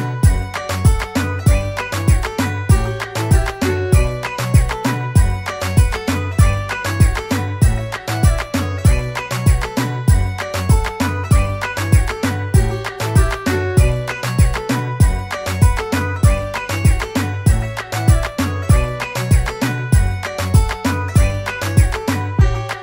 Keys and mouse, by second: 1.5 click, 8.4 click, 12.6 click, 16.6 click, 17.5 click, 20.3 click, 22.2-22.8 typing.